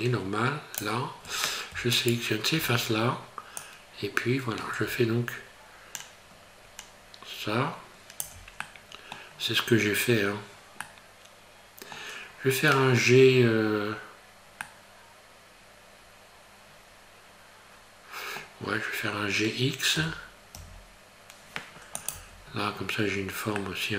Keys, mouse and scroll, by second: 0.8 click, 2.0 alt+right click, 3.5 click, 8.6 middle click, 9.3 scroll down 3, 10.8 middle click, 13.8 scroll down 1, 14.6 middle click, 20.0 g, 22.1 Tab, 22.5 scroll up 2, 23.6 middle click.